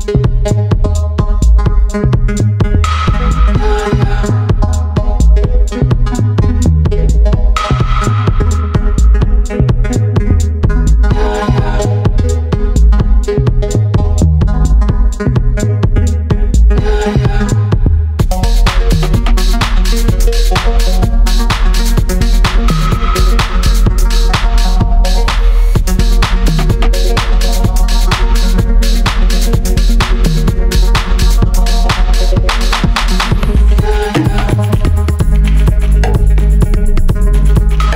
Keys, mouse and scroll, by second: 13.7 click, 20.9-25.9 drag, 26.9-28.8 scroll down 1, 30.2-37.9 drag.